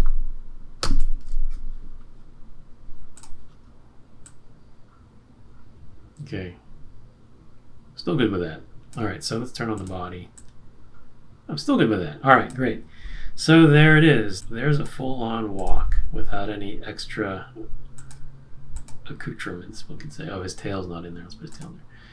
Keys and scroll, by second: 0.8 shift+Right.